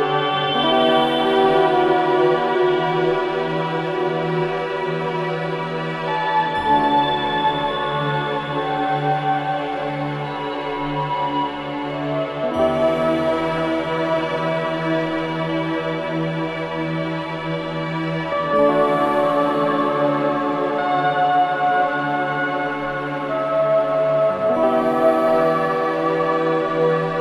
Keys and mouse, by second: 0.0 space, 0.9-1.4 ctrl+alt+drag, 1.6-2.3 ctrl+alt+drag, 3.0 click, 4.1-4.8 drag, 5.1-5.8 drag, 6.5-7.2 drag, 8.8-11.4 drag, 13.7 click, 14.9-15.6 drag, 15.7-18.3 drag, 18.5-19.8 drag, 24.9-26.0 ctrl+alt+drag, 26.1-27.2 drag.